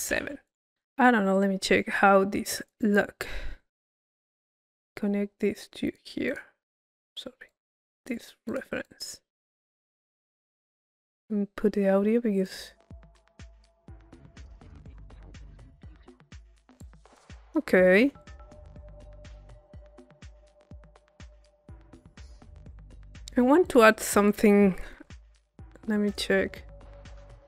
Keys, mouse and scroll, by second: 0.8 click, 1.3-2.6 middle drag, 1.5 click, 2.6 click, 4.2-6.3 drag, 7.5-8.5 drag, 8.9 click, 11.4-12.5 middle drag, 12.5-14.3 drag, 16.3 middle click, 16.8 click, 18.2 click, 18.7-20.2 right drag, 20.2-21.2 drag, 21.7 click, 22.2 middle click, 22.6-23.7 drag, 23.7 right click, 24.3 click, 25.6-27.0 drag.